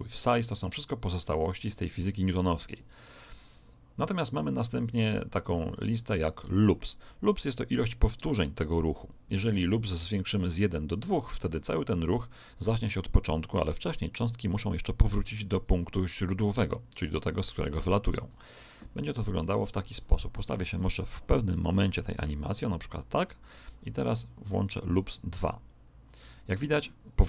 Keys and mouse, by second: 19.1 KP_1, 20.3 Escape, 21.2 click, 25.4 click.